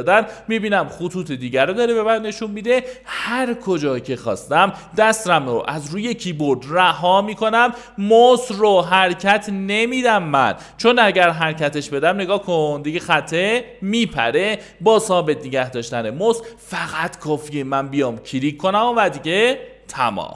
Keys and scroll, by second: 0.0-0.1 typing, 11.3 shift+space, 11.7 shift+space, 15.1 shift+space, 15.6 shift+space.